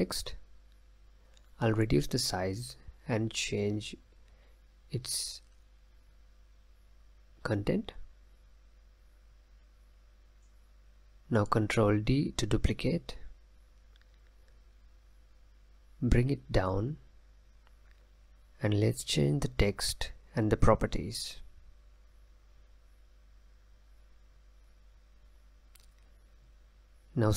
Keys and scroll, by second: 0.0-0.5 typing, 2.8 ctrl+a, 3.0-3.8 typing, 14.8 ctrl+d, 20.8 ctrl+a, 22.0-24.0 typing.